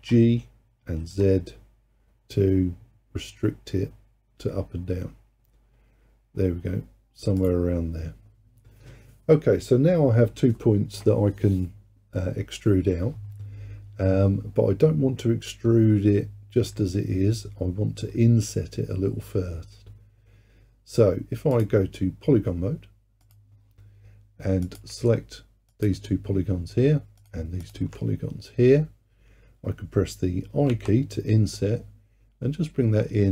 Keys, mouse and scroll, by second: 0.0 g, 23.3-24.8 drag, 25.7 shift+click, 27.2 shift+click, 27.7 shift+click, 30.7 i.